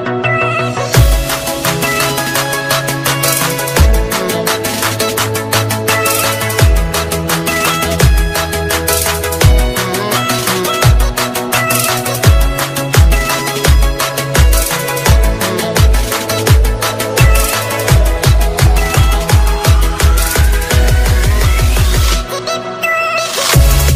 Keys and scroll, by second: 7.5 ctrl+space, 8.4 alt+space, 13.7 ctrl+space, 16.7 ctrl+space.